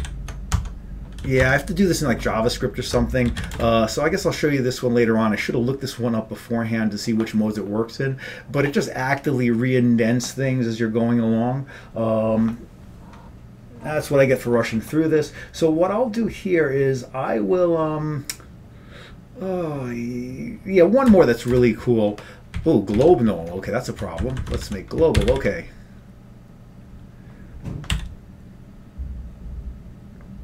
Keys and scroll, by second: 0.0-0.6 typing, 0.6 Tab, 1.3 Down, 1.5 Tab, 3.4 ctrl+x, 3.5 b, 3.6 Return, 21.2 Return, 21.6 Return, 22.6 Up, 23.0 Up, 23.2 Right, 23.7 Right, 24.3 Right, 24.5 Right, 24.6 ctrl+d, 25.2 ctrl+c, 25.4 ctrl+c, 28.0 y.